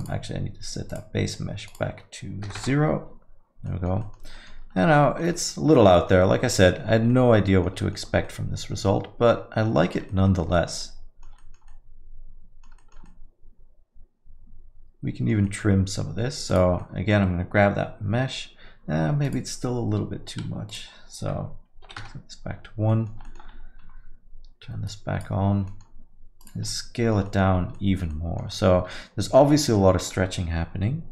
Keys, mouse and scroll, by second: 3.0 click, 3.6 middle click, 4.0 alt+middle click, 4.3 middle click, 4.7 scroll up 3, 4.9 alt+middle click, 5.3 middle click, 5.7 alt+middle click, 6.2 alt+middle click, 6.9 scroll up 2, 7.1 alt+middle click, 7.7 middle click, 8.0 scroll down 2, 8.2 alt+middle click, 9.8 middle click, 10.1 alt+middle click, 10.5 middle click, 10.8 alt+middle click, 11.4 middle click, 11.7 alt+middle click, 12.8 middle click, 13.0 alt+middle click, 15.4 middle click, 15.7 scroll down 2, 16.5 click, 16.9 middle click, 19.2 click, 22.5 click, 22.9 middle click, 23.1 scroll down 1, 23.2 alt+middle click, 23.8 scroll down 1, 24.8 click, 24.8 scroll down 1, 25.6 middle click, 26.4 click, 26.8 alt+middle click, 27.2 middle click, 27.6 scroll up 1, 27.7 alt+middle click, 28.1 alt+middle click, 28.5 middle click, 28.7 scroll down 1, 28.9 alt+middle click, 29.5 middle click, 29.7 alt+middle click.